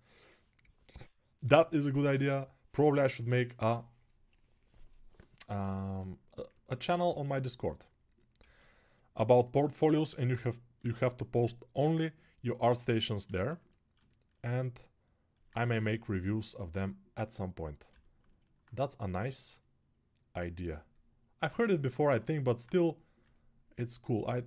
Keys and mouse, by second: 6.2-13.1 ctrl+alt+right drag, 7.2 alt+q, 8.2 a, 9.7 alt+q, 10.6 g, 13.1 shift+click, 13.2 alt+shift+right click, 13.5-23.6 alt+shift+drag, 22.1 alt+q, 23.6-24.4 ctrl+alt+right drag.